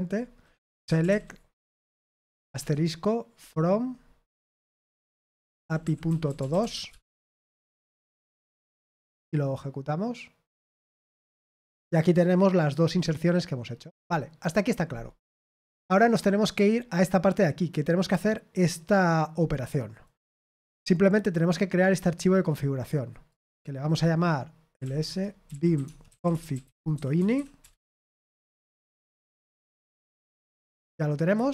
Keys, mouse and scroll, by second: 0.4-7.5 typing, 10.6 click, 15.7 click, 16.6-17.5 scroll down 2, 18.9 click, 20.0 right click, 20.4 click, 23.2 click, 24.4-29.1 typing, 29.7 ctrl+v, 30.4 Escape, 31.1-31.5 typing.